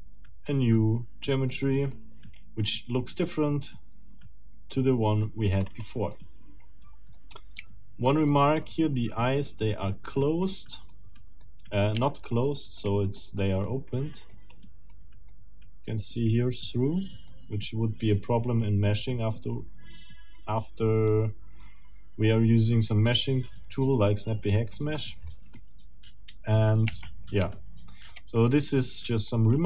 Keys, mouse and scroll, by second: 1.5 scroll down 1, 1.9-5.5 middle drag, 5.5-6.0 scroll up 1, 6.1-7.3 middle drag, 7.7 shift+middle click, 8.5 shift+middle click, 9.5-10.7 shift+middle drag, 10.7-11.2 scroll up 2, 11.4 middle click, 12.1 shift+middle click, 12.9 shift+middle click, 13.5 shift+middle click, 14.3-15.1 scroll up 4, 15.3 middle click, 17.3 middle click, 20.2-24.1 middle drag, 24.5 middle click, 24.7-25.5 scroll down 2, 25.5 middle click, 26.9 Tab, 27.5 shift+middle click, 28.4 shift+middle click.